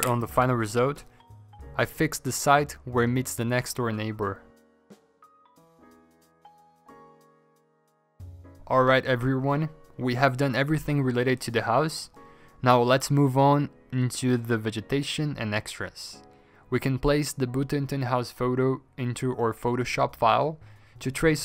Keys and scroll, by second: 4.1 ctrl+d, 9.2 ctrl+z, 9.2 alt+Tab, 11.9 ctrl+v, 11.9 ctrl+g, 13.4 v, 14.0 v, 14.2 ctrl+t, 17.2 typing, 20.9-21.4 typing.